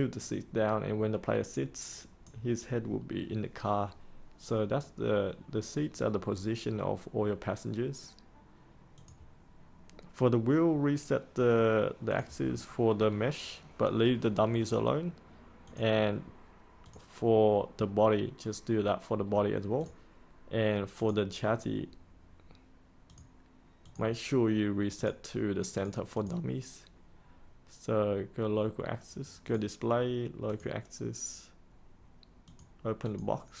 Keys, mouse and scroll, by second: 12.4-13.1 scroll down 1, 15.6 click, 19.8-33.6 drag.